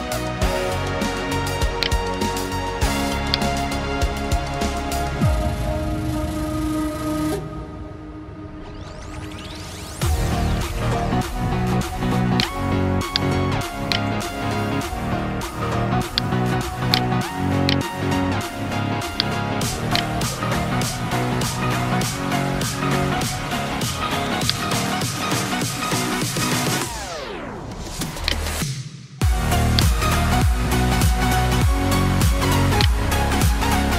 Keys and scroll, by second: 1.3 ctrl+z, 11.9 ctrl+space, 12.4 ctrl+space, 14.7 ctrl+space, 15.2 ctrl+space, 16.0 ctrl+space, 16.8 space.